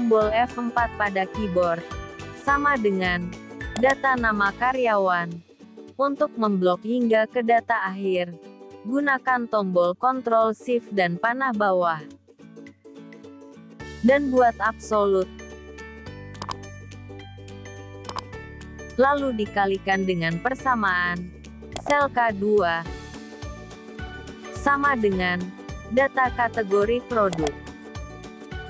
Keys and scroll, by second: 8.6 ctrl+shift+Down, 14.1 F4, 22.7 F4, 27.7 ctrl+shift+Down.